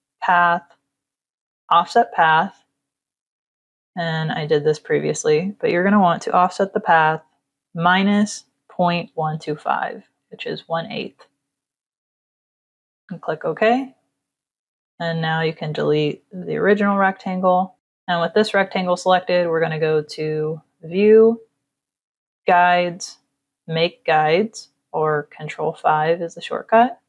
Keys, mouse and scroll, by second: 1.4 click, 3.1 click, 4.1 click, 7.4 KP_Subtract, 8.3 KP_Decimal, 8.8 KP_1, 9.0 KP_2, 9.3 KP_5, 12.4 click, 14.2 click, 16.1 Delete, 17.5 click, 20.1 click, 26.2 click.